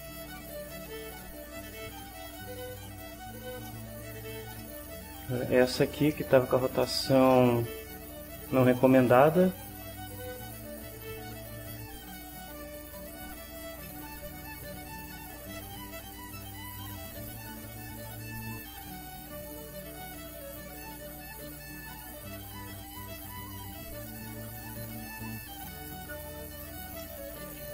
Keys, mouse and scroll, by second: 1.0-3.5 right drag, 3.7 middle click, 3.9 click, 4.3 shift+middle click, 4.6-7.3 shift+middle drag, 7.5 shift+middle click, 10.4 click, 11.6 click, 14.3-16.1 right drag, 16.9 click, 18.1-19.5 drag, 21.1-22.2 drag, 22.7 click, 23.8-25.2 right drag, 25.3-26.9 right drag, 27.0 middle click.